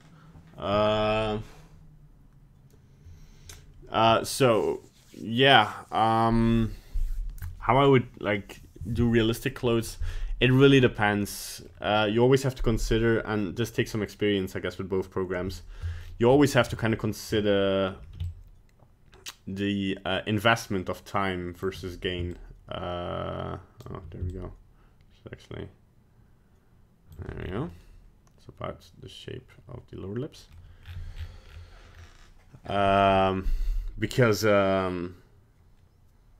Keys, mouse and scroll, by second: 10.5-10.8 scroll down 3, 10.8 middle click, 16.0 scroll up 4, 16.5 right click, 16.8 middle click, 16.9 middle click, 18.2 shift+click, 22.3 shift+click, 24.3 shift+click, 27.4 scroll down 3, 27.7 middle click, 29.9 middle click, 30.0 middle click, 30.5 middle click, 30.8 scroll down 5, 31.1-31.5 scroll up 6, 31.5 scroll down 2, 31.9 scroll up 2.